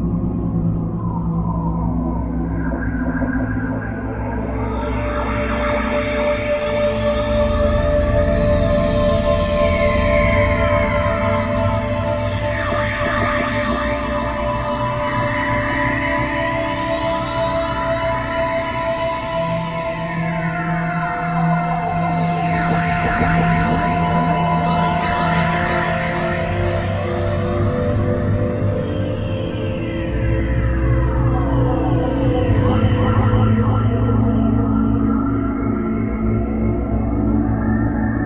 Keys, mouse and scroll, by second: 1.8 click, 2.6 KP_1, 3.7 r, 6.0 click, 8.0 g, 9.8 click, 11.0 KP_3, 12.8 r, 14.8 click, 16.2 middle click, 17.4 scroll up 4, 19.7 KP_0, 20.9-21.3 scroll up 3, 21.7-22.0 scroll down 1, 22.6 t, 31.5 Escape, 32.9 right click, 34.6 r, 35.0 click, 36.4 click.